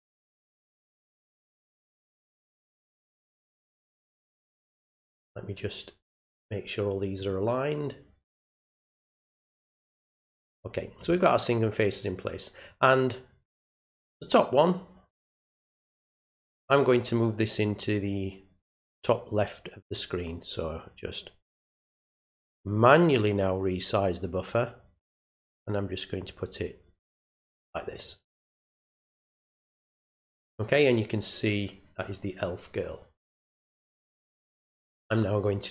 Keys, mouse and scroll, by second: 1.3 click, 2.4-4.5 drag, 5.0-6.1 drag, 7.2 right click, 9.9 click, 13.8 click, 16.2 click, 17.6-19.9 drag, 22.2-27.6 drag, 34.2 click.